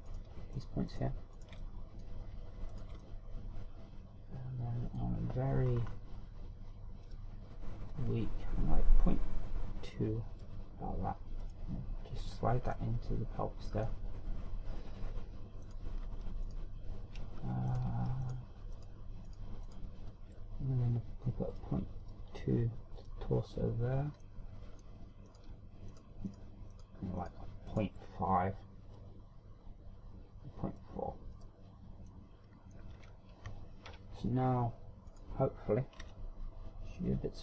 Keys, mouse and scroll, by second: 0.1 click, 1.3 right click, 1.6 shift+right click, 2.0 shift+right click, 2.3 shift+right click, 2.6 middle click, 3.7 shift+right click, 4.0 middle click, 6.7-7.0 scroll up 3, 8.0 click, 8.9 click, 12.4 click, 13.8 middle click, 16.6 right click, 17.4 shift+right click, 18.7 right click, 19.3 shift+right click, 19.8 shift+right click, 20.3 shift+right click, 22.6 click, 23.1 click, 24.1 click, 25.3 middle click, 26.4 right click, 27.3 shift+right click, 27.8 right click, 28.2 shift+right click, 28.7 shift+right click, 30.0 click, 32.3 click, 33.1 middle click, 34.0 Tab, 34.9 KP_3, 35.4 scroll down 3, 36.1 right click, 37.0 r.